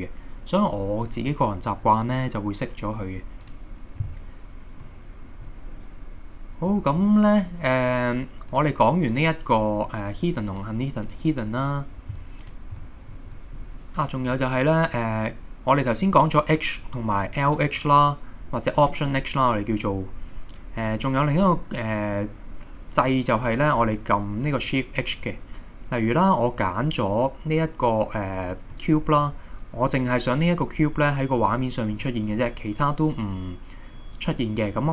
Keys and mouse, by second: 3.5 click, 4.9-5.7 middle drag, 6.7 middle click, 8.5 click, 9.2 click, 11.1 click, 11.7 click, 12.8 middle drag, 13.4 middle click, 14.0 click, 22.2-23.3 middle drag, 28.8 middle click.